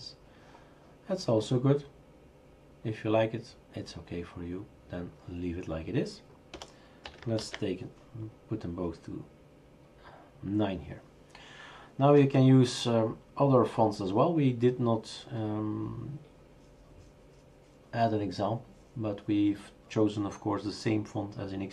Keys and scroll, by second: 6.5-7.0 typing, 7.4 ctrl+s.